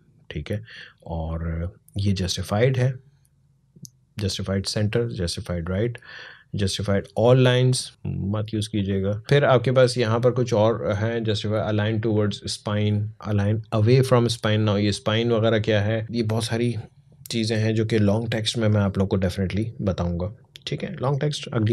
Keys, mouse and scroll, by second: 6.7 click, 8.5 click, 14.4 click, 20.6-21.7 drag.